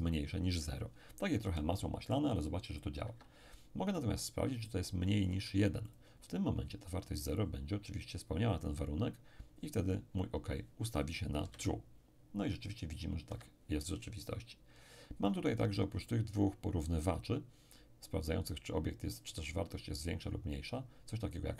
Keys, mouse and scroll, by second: 1.4 p, 3.0 Escape, 5.3 click, 5.4 1, 11.4 p, 13.3 Escape, 15.3 click.